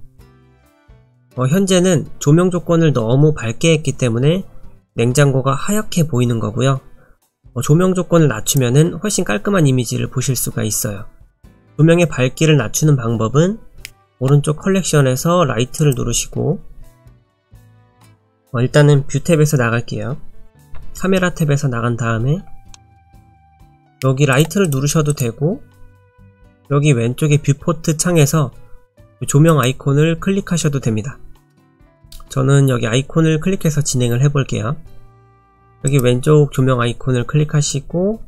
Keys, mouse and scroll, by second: 0.7 click, 8.5 click, 11.4 click, 15.8 click, 20.7 KP_0, 22.2-23.5 scroll down 3, 22.7 middle click, 24.3 click, 24.7 click, 25.4 click, 29.5 click, 35.9 click.